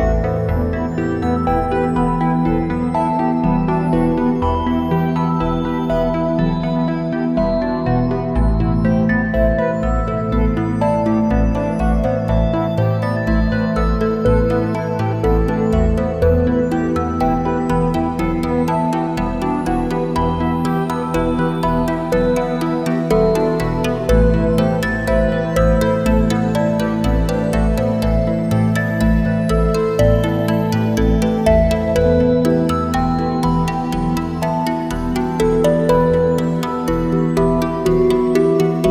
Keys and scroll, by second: 2.2 space, 4.0 `, 4.1 space, 12.0 ctrl+shift+a, 12.2 space, 12.8 space, 17.3 ctrl+shift+a, 20.8 ctrl+shift+a, 27.6 ctrl+shift+a, 32.3 ctrl+shift+a, 33.4 space.